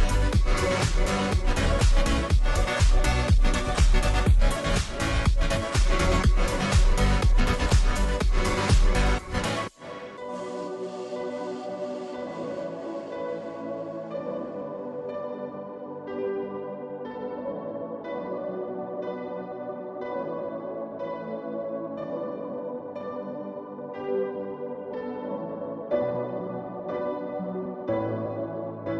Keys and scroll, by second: 3.3-4.8 space, 12.5-13.1 space, 22.6-23.2 space, 25.6 ctrl+j, 25.6 space.